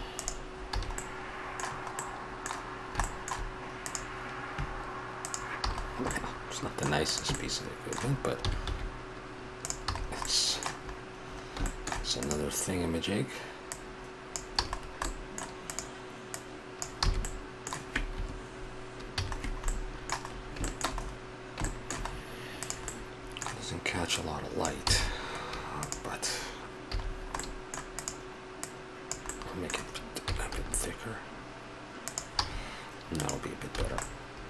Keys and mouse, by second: 0.7 a, 1.1 middle drag, 3.8-5.3 right drag, 5.7 a, 8.4 s, 9.9 a, 12.2-13.1 right drag, 14.6 a, 17.0 s, 19.2 a, 20.0 middle drag, 21.9 middle click, 22.1-22.6 middle drag, 22.6-23.3 right drag, 23.3-24.2 middle drag, 24.2 click, 24.6-24.9 middle drag, 24.9 s, 26.9 a, 28.0 right click, 30.2 s, 32.4 a, 33.8 a.